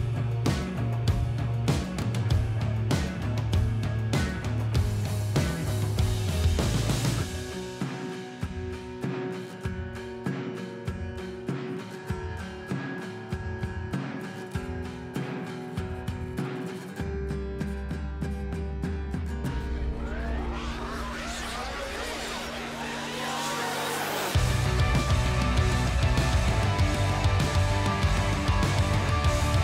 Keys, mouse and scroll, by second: 1.4 shift+click, 1.9 shift+click, 3.5 shift+click, 3.9 shift+click, 4.4 middle click, 6.0 shift+click, 6.5 shift+click, 7.1-8.1 middle drag, 9.0 shift+click, 9.3 shift+click, 9.8 middle click, 11.0 shift+click, 11.3 shift+click, 12.4 shift+click, 12.8 shift+click, 13.3 middle click, 14.9 shift+click, 15.9-17.1 middle drag, 17.7 alt+e, 19.1-20.1 drag, 22.8 alt+a, 27.4 Tab, 28.4 alt+a, 29.4 KP_1.